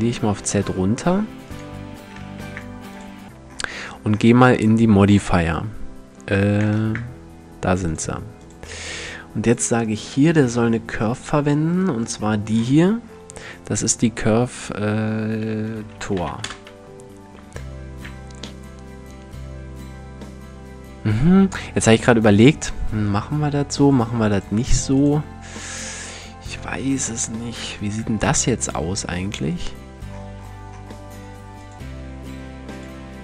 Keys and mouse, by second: 1.2-2.4 drag, 1.6 s, 3.8 click, 4.4-6.4 middle drag, 6.4 shift+space, 7.5-9.9 drag, 11.4-12.2 right drag, 15.9 click, 23.3-23.9 middle drag, 25.7-29.1 middle drag, 30.8 middle click.